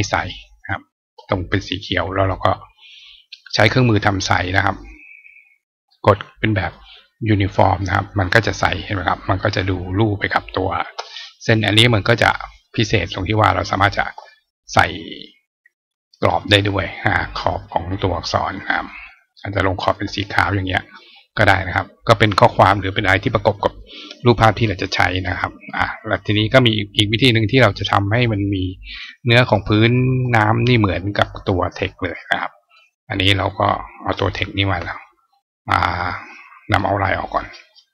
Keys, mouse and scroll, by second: 0.4 click, 2.1-3.3 drag, 3.9 click, 5.3 click, 6.5 click, 7.3 click, 12.4 click, 13.5 click, 16.2 click, 18.7 right click, 19.7 click, 25.8-27.4 drag, 28.1-29.5 drag, 29.4 right click, 31.0 click, 31.3 click, 33.3 click, 37.1 right click.